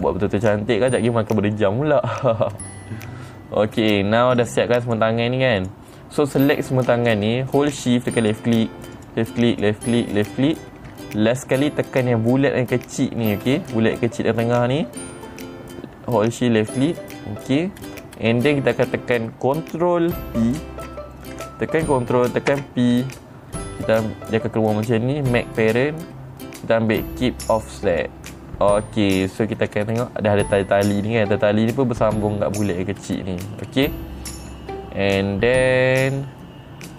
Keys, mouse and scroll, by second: 0.4 click, 3.0 middle click, 3.0 scroll down 2, 4.3 middle click, 4.3-4.9 scroll up 3, 4.9 click, 5.4 click, 6.1 click, 8.7 shift+click, 9.5 shift+click, 10.0 shift+click, 10.7 shift+click, 13.9 middle click, 14.0 scroll up 2, 17.1 shift+click, 18.3 middle click, 18.3-19.3 scroll down 5, 18.7 middle click, 23.0 ctrl+p, 28.4 click, 30.2 middle click, 30.2-30.6 scroll up 4, 33.6-35.8 scroll down 5.